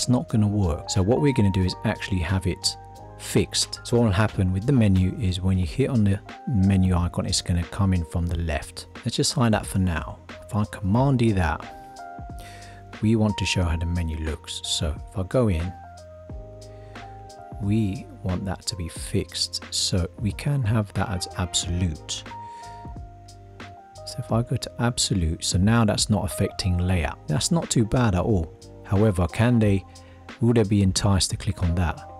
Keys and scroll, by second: 10.9 super+d.